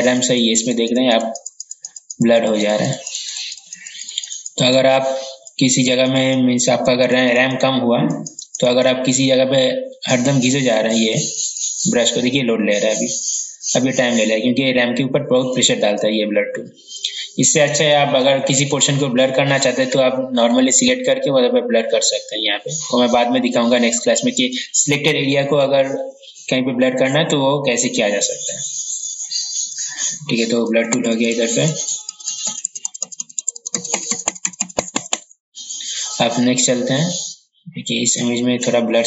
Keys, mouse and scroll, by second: 31.2-33.8 typing, 32.7 ctrl+z, 38.2 click.